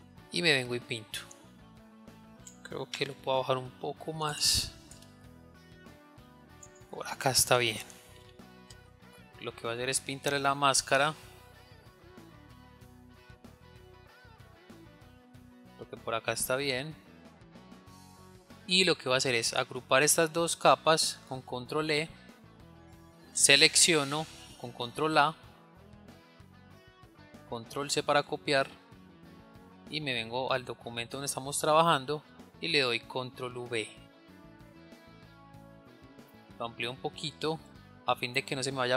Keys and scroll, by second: 21.7 ctrl+e, 25.5 ctrl+a, 28.8 ctrl+c, 33.8 ctrl+v, 37.5 ctrl+t.